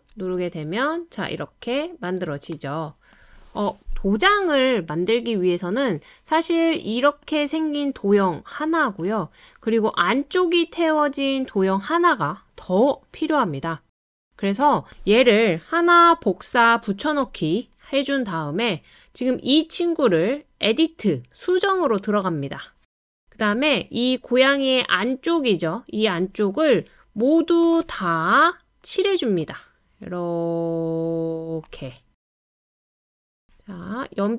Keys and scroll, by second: 16.5 super+c, 17.0 super+v.